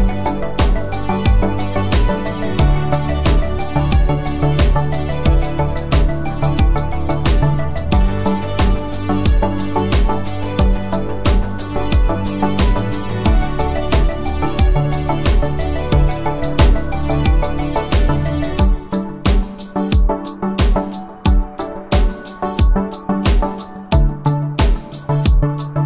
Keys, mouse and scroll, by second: 0.9 u, 2.5-4.1 click, 5.4 F9, 9.1 alt+click, 17.5-18.5 drag.